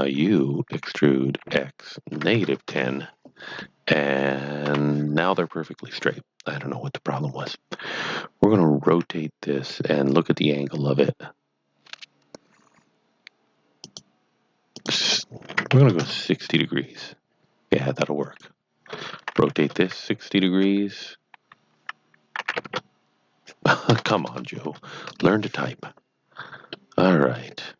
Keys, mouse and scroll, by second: 0.6-2.3 typing, 2.1 KP_Subtract, 2.7 KP_Enter, 3.6 middle click, 4.6 KP_7, 8.8 r, 13.8 click, 14.7 click, 15.4 KP_Subtract, 15.6 KP_6, 16.0 KP_Enter, 18.2 click, 19.2 r, 19.5 KP_6, 19.8 KP_0, 19.8 KP_Subtract, 20.6 Escape, 22.4 r, 22.5 KP_9, 23.9 BackSpace, 24.1 BackSpace, 24.6 KP_6, 25.0 KP_Enter, 26.8 middle click.